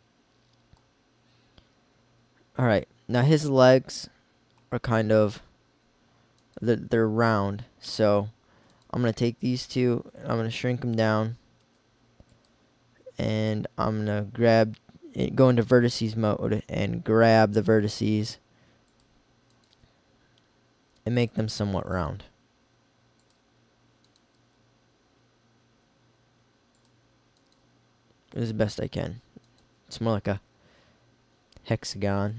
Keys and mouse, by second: 8.4 middle click, 9.9 s, 11.1 click, 11.8 s, 17.6 g, 19.1 click, 19.8 g, 22.1 g, 24.4 g, 27.5 g, 29.6 g.